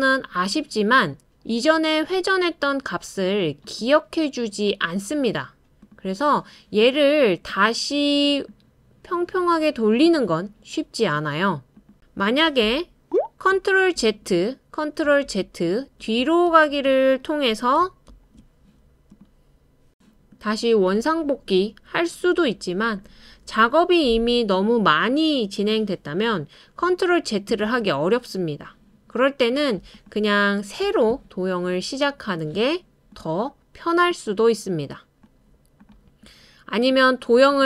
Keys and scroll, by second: 14.0 super+z, 14.9 super+z, 15.7 super+z, 16.7 super+z, 18.1 super+z, 18.8 super+z, 19.6 super+z, 30.8 BackSpace.